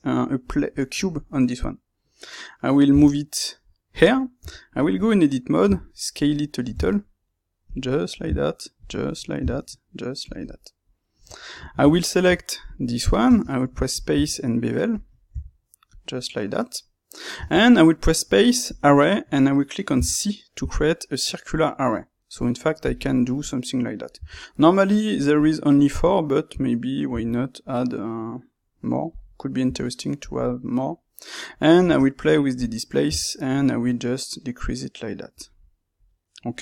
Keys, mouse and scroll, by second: 2.8 g, 3.9 click, 4.3 Tab, 5.6-7.7 middle drag, 6.7 s, 7.7 click, 7.8 middle click, 8.1 s, 8.8 click, 8.9-10.2 middle drag, 9.3 s, 10.2 click, 10.3-12.6 middle drag, 12.1 Tab, 12.6 click, 13.2 space, 23.1-36.6 middle drag.